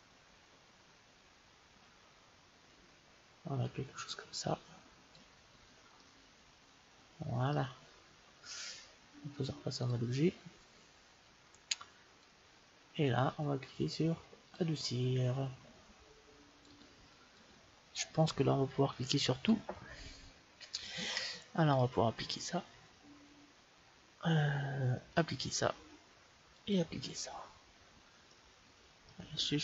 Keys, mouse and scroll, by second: 5.8-7.6 middle drag, 9.4-11.0 drag, 12.4-13.9 drag, 14.3-16.3 drag, 16.5-18.3 drag, 19.1-21.6 middle drag, 21.6-23.4 drag, 25.0-28.3 drag, 28.2-29.6 middle drag.